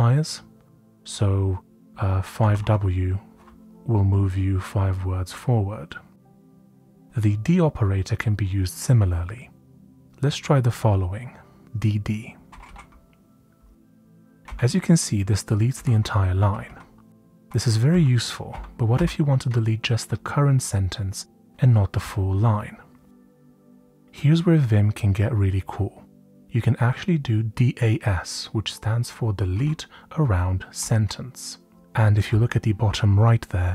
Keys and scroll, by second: 2.4 typing, 3.8 typing, 5.9-6.6 typing, 12.5 typing, 14.4 typing, 15.7-17.4 typing, 18.4-18.9 typing, 23.8-24.5 typing, 29.5-30.8 typing.